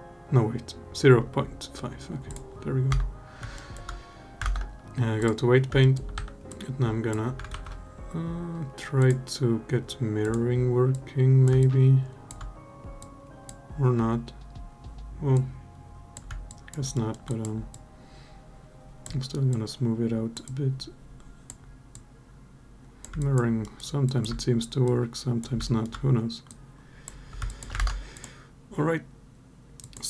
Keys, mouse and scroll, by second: 2.1 click, 2.7 Tab, 3.3 alt+middle drag, 4.2 ctrl+Tab, 5.6 alt+middle click, 5.9 2, 6.3 click, 7.6 ctrl+z, 8.8-10.3 drag, 10.7 click, 11.4 alt+click, 12.8 click, 15.1 click, 16.2 alt+click, 16.7 alt+middle click, 17.0 alt+click, 17.5 click, 19.3 click, 20.2 click, 21.7 click, 22.9 alt+click, 23.4 alt+middle click, 23.8 alt+click, 24.6 click, 25.4 alt+middle click, 26.3 click, 27.2 alt+click, 27.5 ctrl+Tab.